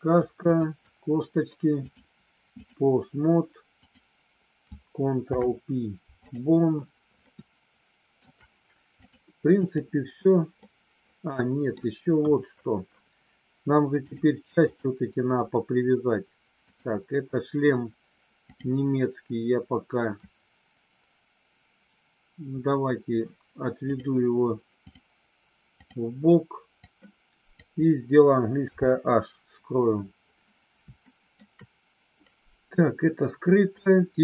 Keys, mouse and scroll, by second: 1.7-2.7 drag, 3.8 click, 5.1 ctrl+p, 7.2-8.2 shift+middle drag, 9.1 click, 10.6-11.7 middle drag, 12.1 KP_1, 14.6 click, 16.6 click, 18.4 click, 25.8 click, 26.7 click, 28.6 h, 31.1 shift+middle click.